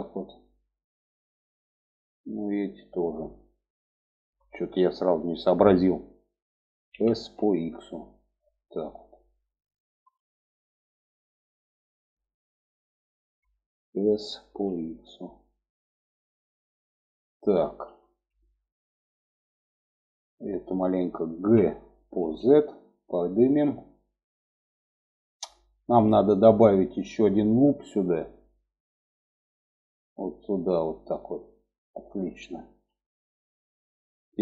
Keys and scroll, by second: 6.4 s, 13.7 s, 20.9 g.